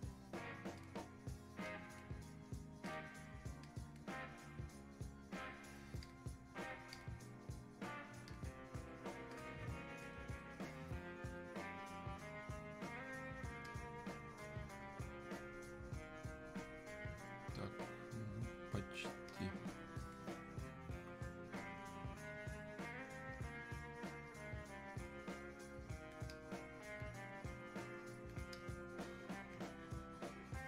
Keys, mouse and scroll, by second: 0.8 click, 6.1-30.6 drag.